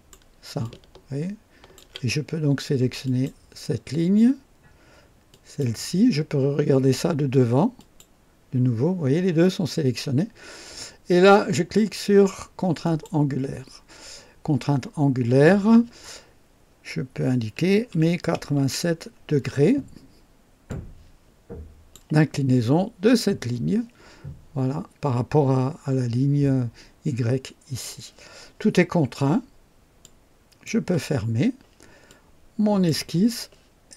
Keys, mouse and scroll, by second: 0.6-1.9 ctrl+alt+drag, 3.0 click, 5.3 click, 7.7 click, 12.8 click, 17.6 KP_8, 17.9 KP_7, 18.1 KP_7, 18.5 KP_Enter, 20.7-22.1 drag, 30.0 click, 32.1-33.0 drag.